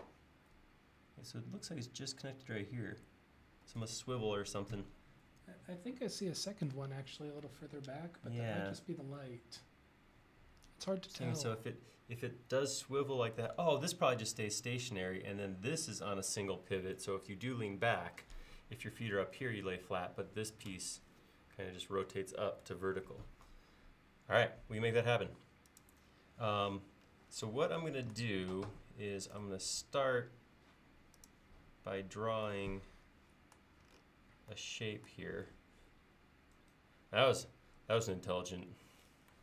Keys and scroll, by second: 28.5 l.